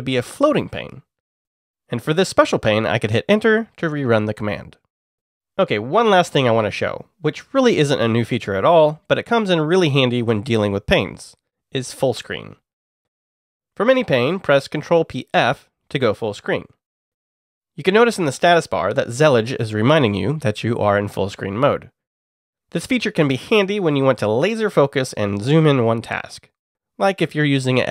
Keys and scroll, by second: 0.2 e, 3.9 Return, 11.5 ctrl+p, 11.8 typing, 13.6 alt+Left, 15.3 ctrl+p, 16.6 f, 18.6-19.9 typing, 19.4 Return, 21.4-23.4 typing.